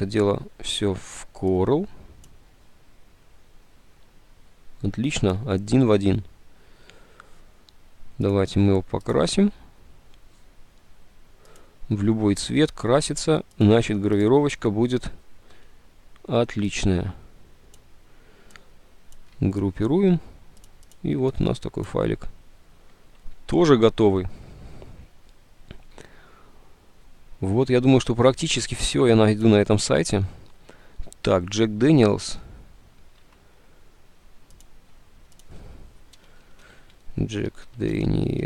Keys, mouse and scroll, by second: 19.9 ctrl+g, 33.3 alt+Tab, 36.0-38.4 typing.